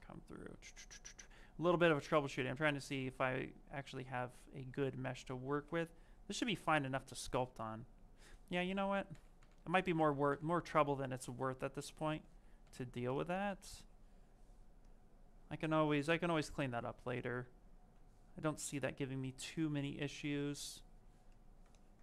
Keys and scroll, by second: 0.0 space, 8.3 ctrl+z, 8.5 ctrl+z, 9.0 ctrl+z, 9.2 ctrl+z, 9.8 ctrl+z, 12.1 ctrl+z, 12.5 ctrl+z, 17.5 s.